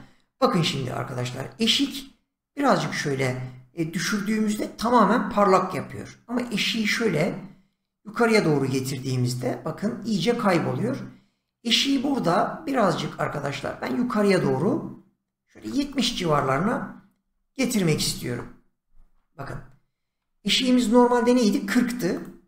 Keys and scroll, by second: 17.2 7, 18.1 Return, 19.4 ctrl+z.